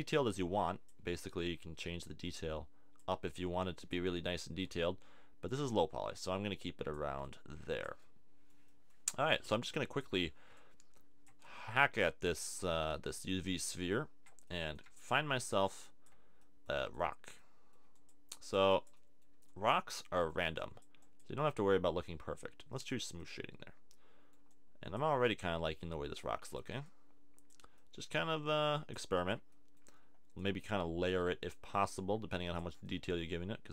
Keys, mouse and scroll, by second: 4.2 super+z, 16.6-20.3 middle drag, 21.6-23.2 middle drag, 23.4 middle click, 25.5 middle click, 26.4-28.7 middle drag, 29.5-33.7 middle drag.